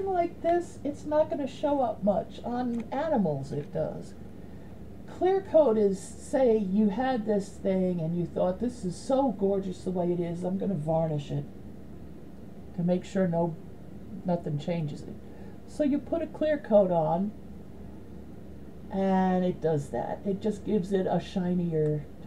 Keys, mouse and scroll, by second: 16.3-18.6 drag.